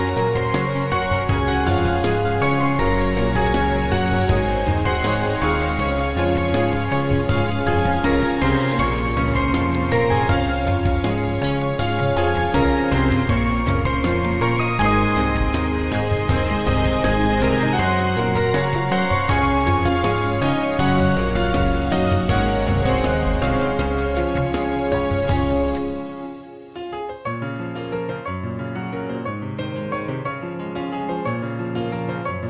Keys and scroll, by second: 31.3 ctrl+s.